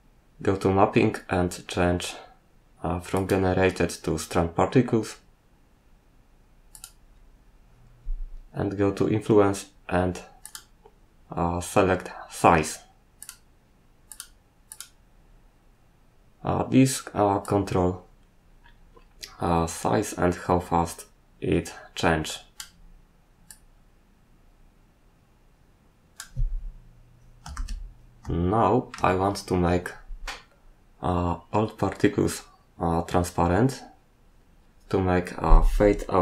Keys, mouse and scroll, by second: 1.5 scroll down 2, 3.1 click, 6.7 click, 7.8-8.8 scroll down 1, 9.4 scroll down 1, 10.4 click, 13.2 click, 14.1 click, 14.7 click, 17.4 click, 23.5 click, 27.5 shift+z, 28.4 shift+middle click.